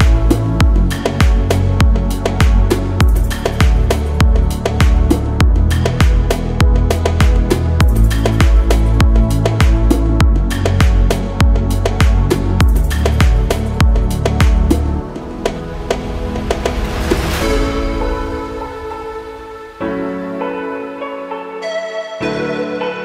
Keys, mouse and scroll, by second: 1.2 click, 2.3 s, 4.4 click, 5.3-6.3 scroll down 2, 6.3 click, 6.3 scroll down 1, 6.7-9.0 middle drag, 12.1 click, 13.2-15.4 drag, 16.4 click, 16.8-19.4 middle drag, 22.6 click.